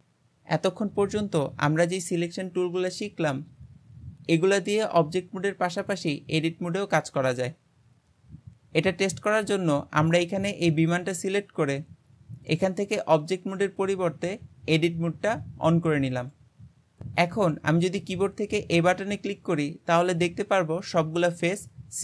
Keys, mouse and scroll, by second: 0.0 click, 9.2-10.1 scroll up 2, 10.1 click, 12.5-15.5 drag, 20.0-22.0 middle drag.